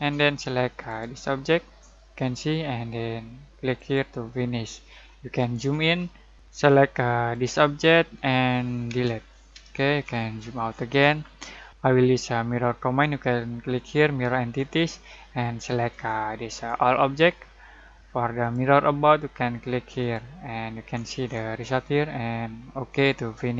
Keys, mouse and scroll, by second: 0.8 click, 3.7 click, 5.0 scroll down 2, 6.3 click, 7.3 click, 8.9 Delete, 9.6-10.0 scroll down 2, 10.0-11.7 scroll up 1, 14.5-20.7 drag, 16.2 click, 20.7 scroll down 1, 22.8 click.